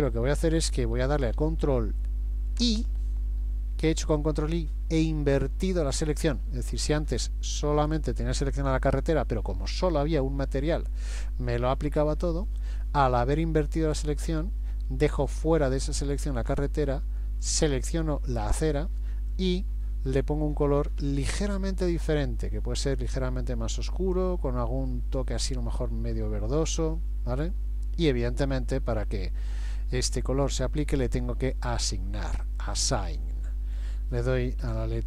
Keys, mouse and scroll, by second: 2.6 ctrl+i, 17.4 click, 19.3 click, 32.4 click, 34.7 a.